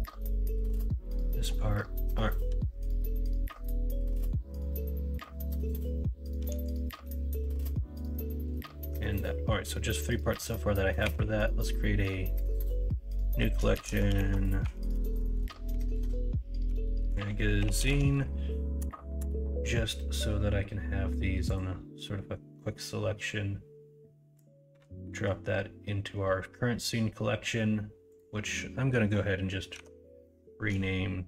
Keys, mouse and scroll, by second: 3.0 middle click, 4.1 middle click, 9.7 middle click, 10.2 middle drag, 11.0 m, 15.1 BackSpace, 29.7 F2.